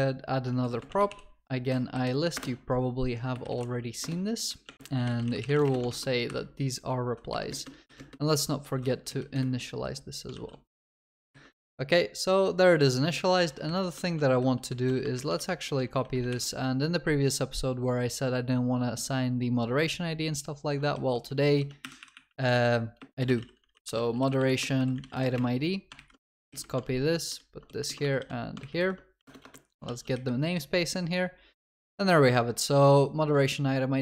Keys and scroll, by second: 6.3 Escape, 9.4 Return, 10.4 ctrl+s, 12.8 Escape, 14.1 ctrl+c, 16.3 ctrl+y, 21.9 Delete, 26.0 ctrl+shift+Left, 26.3 ctrl+c, 26.8 ctrl+w, 28.0 ctrl+v, 28.0 ctrl+w, 29.3 alt+Return, 29.9 ctrl+s.